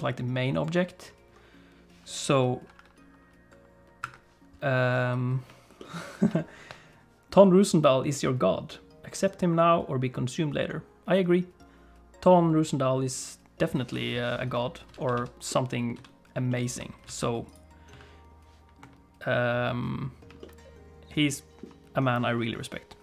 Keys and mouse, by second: 4.0 KP_7, 5.8 shift+click, 14.9 alt+a, 15.5 middle click, 15.9 a, 16.5 shift+middle click, 17.0 alt+a, 17.5 click, 17.9 a, 18.8 KP_7, 20.4-21.6 shift+middle drag.